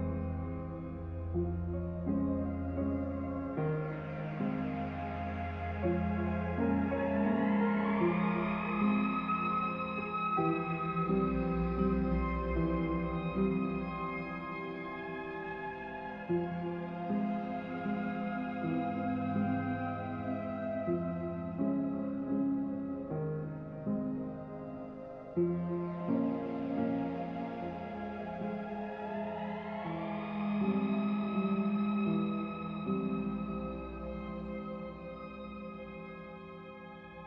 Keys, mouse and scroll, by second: 4.4 click, 8.0 click, 10.2 click, 13.5 click, 16.5 click, 18.6 click, 20.2 click, 22.3 click.